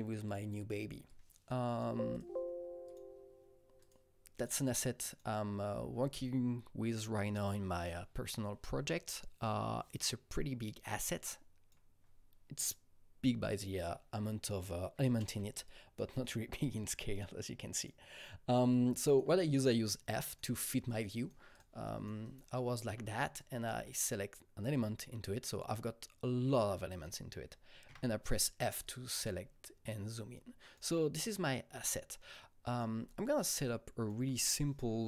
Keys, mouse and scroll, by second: 0.1 double click, 0.2 click, 1.1 click, 2.8 click, 3.8 click, 4.3 click, 5.1 click, 11.3-14.2 drag, 14.9 click, 14.9 f, 15.6 alt+click, 16.2-20.1 alt+right drag, 17.1 alt+click, 17.7 alt+click, 20.1 alt+double right click, 20.5 alt+right click, 20.9 alt+right click, 21.1 alt+double right click, 21.5 click, 21.8 alt+double right click, 22.2 alt+double right click, 23.4 alt+click, 27.9 alt+click, 27.9 f, 28.8 click, 29.1 f, 29.6-32.2 alt+right drag, 32.6-35.0 alt+right drag.